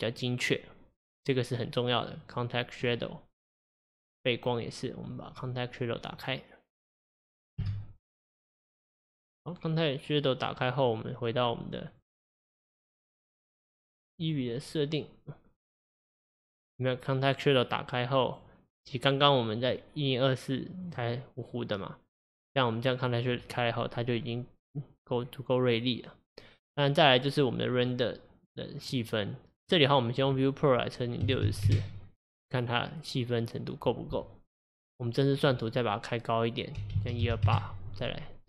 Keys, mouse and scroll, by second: 0.2 click, 2.0 click, 2.3 click, 2.8 scroll down 3, 3.0-4.2 scroll up 1, 4.2 click, 5.3 click, 6.0-7.6 scroll up 5, 7.6 KP_0, 8.6-11.6 scroll down 1, 11.9 click, 14.2 click, 15.8 click, 18.3-23.9 drag, 25.0 click, 27.8-29.1 drag, 29.7-32.8 drag, 35.2-38.2 drag.